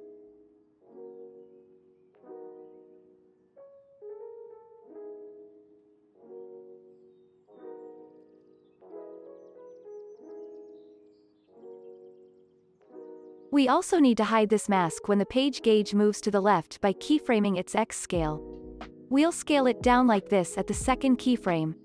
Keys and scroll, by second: 2.4 x, 4.3 Up, 7.7 ctrl+s, 16.9 s.